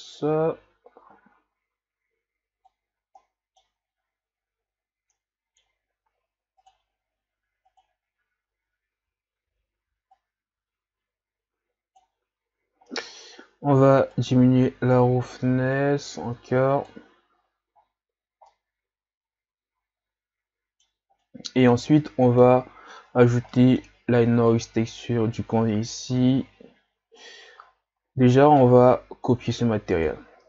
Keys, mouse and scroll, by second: 3.2 middle click, 3.8-4.2 scroll up 4, 7.8 click, 14.3-17.4 drag, 17.4-18.4 scroll down 1, 21.3-29.6 middle drag, 30.2-30.4 middle drag.